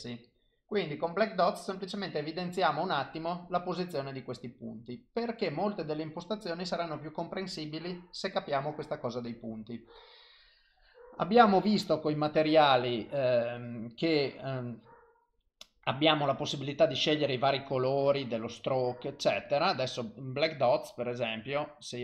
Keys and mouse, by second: 1.9 click, 14.9 click, 17.8 click.